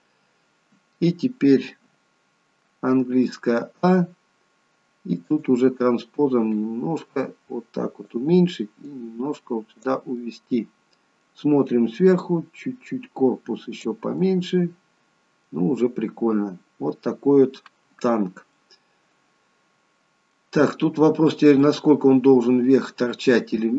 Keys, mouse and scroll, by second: 0.2-1.8 scroll down 1, 1.8 scroll down 1, 3.1 a, 5.3 click, 6.6 click, 10.3 middle click, 12.3 click, 14.2 middle click, 15.9 middle click, 17.7 scroll up 2, 18.0-18.7 scroll down 2, 18.7 middle click.